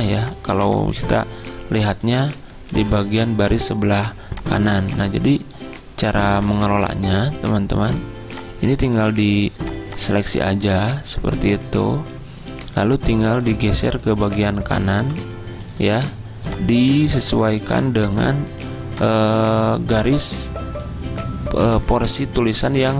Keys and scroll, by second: 2.9 ctrl+z.